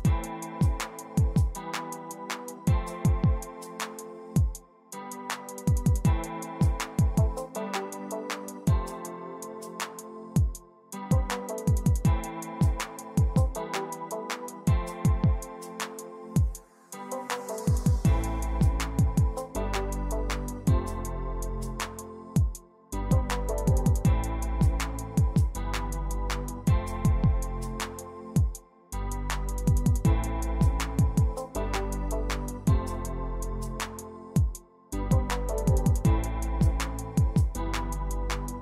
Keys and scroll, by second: 11.9 a, 19.0 ctrl+c, 19.4 ctrl+v, 33.2-34.7 typing.